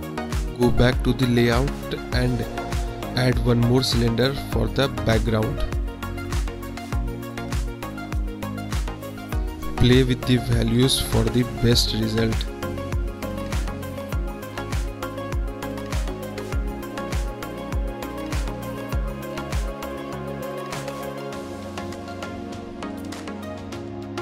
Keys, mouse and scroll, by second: 0.3 click, 0.4 middle click, 1.5 click, 2.2-2.6 middle drag, 3.0 KP_1, 4.6-5.0 middle drag, 7.7 shift+a, 11.2 click, 11.8 middle click, 13.9-15.0 drag, 15.2-15.7 middle drag, 16.0 click, 16.6 middle drag, 17.4 click, 17.7 KP_1, 18.3 click, 20.1 click, 20.4 click, 21.6-22.7 drag, 23.3 middle click.